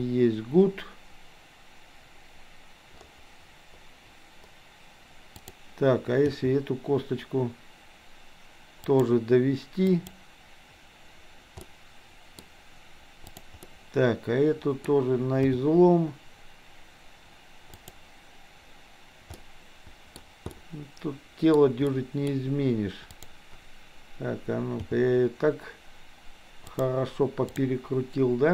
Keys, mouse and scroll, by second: 5.4 click, 6.4 g, 10.0 click, 11.6-12.4 middle drag, 13.3 click, 13.8-14.9 middle drag, 15.5 g, 19.4 middle click, 20.5-21.5 scroll up 1, 21.5-22.0 scroll down 1, 22.0 middle click, 23.1 click, 24.9 g, 27.5 click.